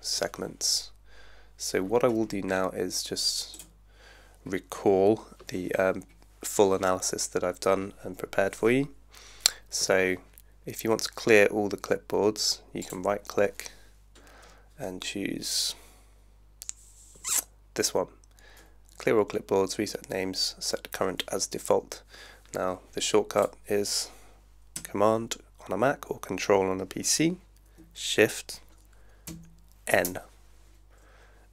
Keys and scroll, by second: 29.3 shift+super+n.